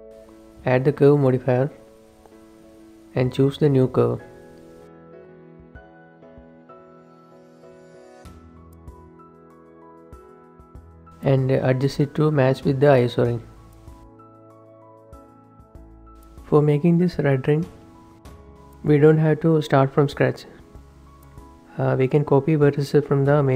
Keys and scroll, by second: 7.9 shift+7, 10.0 Tab, 10.2-10.6 typing, 12.5-13.2 typing, 15.1 shift+h, 21.6 shift+Tab, 21.9 shift+h, 22.2 shift+Tab.